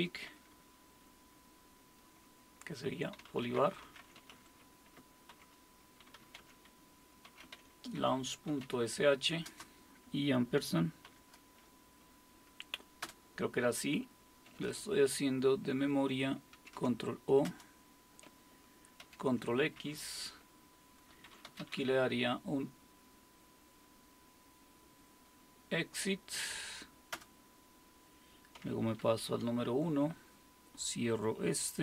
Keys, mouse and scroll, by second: 3.0-9.5 typing, 11.1 typing, 13.0 typing, 16.5 ctrl+o, 16.6-19.5 typing, 21.0-22.2 typing, 27.1 Return, 29.0 super+1.